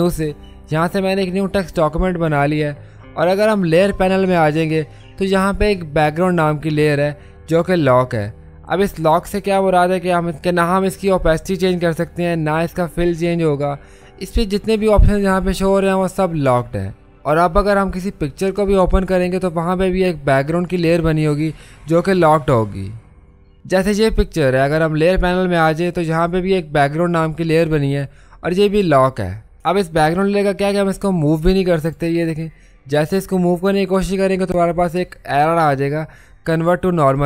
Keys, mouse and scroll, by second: 0.0 click, 0.6 click, 3.1 typing, 31.3-37.2 drag.